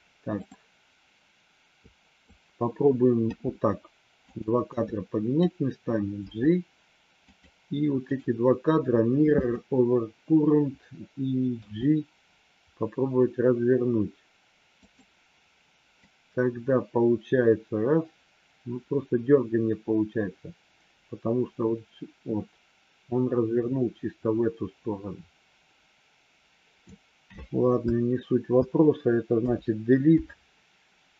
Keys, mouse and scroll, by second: 1.8 click, 3.2 g, 4.7 click, 6.2 g, 8.2-9.5 right drag, 11.5 g, 16.0-26.9 drag, 29.3 Delete.